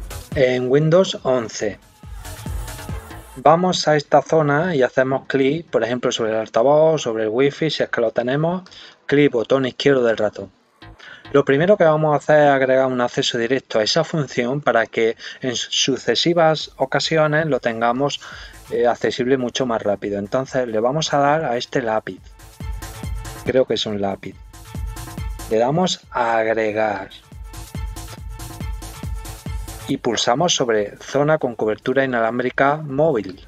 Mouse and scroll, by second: 8.6 click, 23.2 click, 26.9 click, 33.2 click.